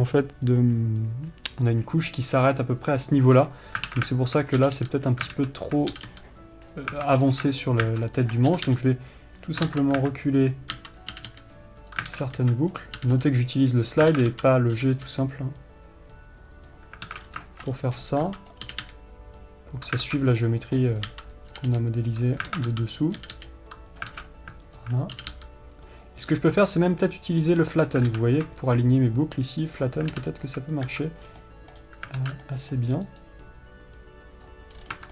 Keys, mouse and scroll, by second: 17.8-20.2 middle drag, 28.1 right click, 30.2 right click, 31.8-34.9 middle drag, 34.9 right click.